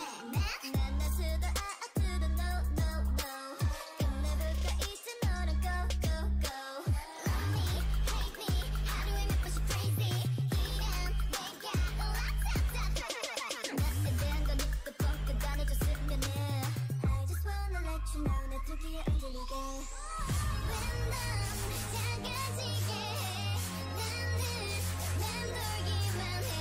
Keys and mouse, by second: 1.2-3.0 drag, 1.6 o, 2.1 g, 5.6 s, 9.4-10.5 middle drag, 10.2 o, 10.5-12.7 right drag, 11.1 g, 12.5 Tab, 12.7 middle click, 14.1 Tab, 14.6 click, 15.0-17.3 drag, 15.4 s, 19.2 s, 20.6 Tab, 22.0 middle click.